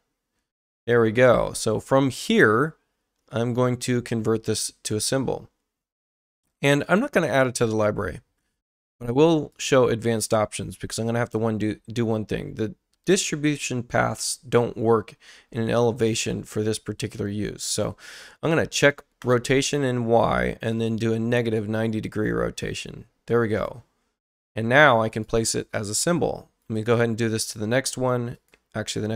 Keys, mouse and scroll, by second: 4.9 click, 9.5 click, 19.2 click, 20.7 click, 23.5 click, 25.1 click, 26.6 right click, 28.3 click.